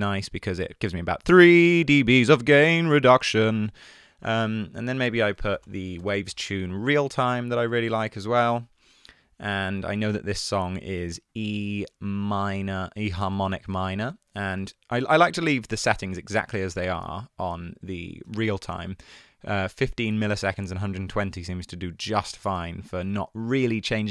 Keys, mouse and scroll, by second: 5.4-6.3 typing.